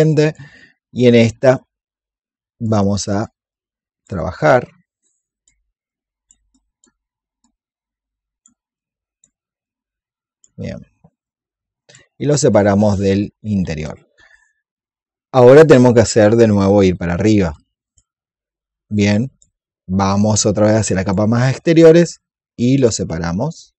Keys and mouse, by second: 2.5-6.2 drag, 6.4 alt+click, 7.3-11.1 drag, 12.4 alt+click, 17.7-20.6 drag, 20.6 alt+click, 22.0 click.